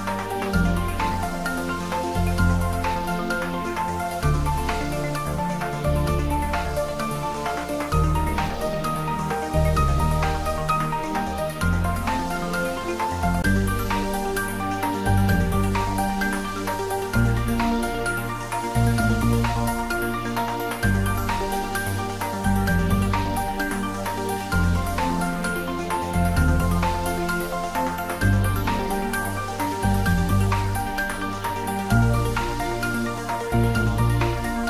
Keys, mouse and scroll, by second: 1.4-2.1 scroll up 1, 2.1-2.5 scroll down 1, 2.5 middle click, 5.2 Tab, 5.5-5.8 scroll up 1, 7.1 ctrl+r, 8.7 ctrl+r, 9.7 click, 20.8 click, 21.3-21.8 scroll down 1, 21.8-23.2 middle drag, 23.2 scroll up 1, 23.8 scroll down 1, 24.4 middle click, 25.6-27.3 scroll up 1, 28.1 3, 28.6 scroll down 1, 29.4 click, 30.8 3, 31.2 click, 31.9 scroll down 1, 34.1-34.6 middle drag.